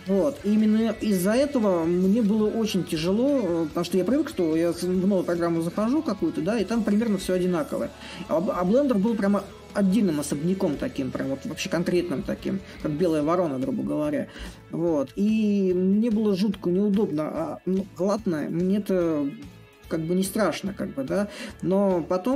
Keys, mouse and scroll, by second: 1.5-6.6 drag, 6.9-12.0 drag, 12.4-17.5 drag, 18.6-22.3 drag.